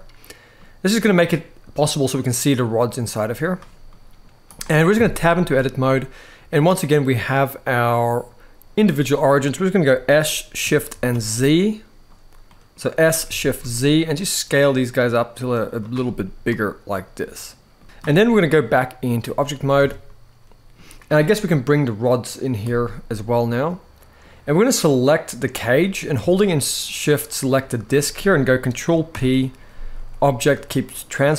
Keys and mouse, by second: 1.8 click, 3.2 click, 3.6 middle click, 4.2 click, 4.7 Tab, 5.0 middle click, 7.5-8.5 drag, 8.9 middle click, 9.6-10.6 typing, 12.2 middle click, 12.7 s, 13.3 shift+z, 15.8-17.5 middle drag, 18.2-18.9 drag, 19.5 alt+a, 19.8-20.5 middle drag, 22.3 click, 22.8-23.9 middle drag, 25.0-25.9 drag, 27.1 shift+click, 28.8 ctrl+p.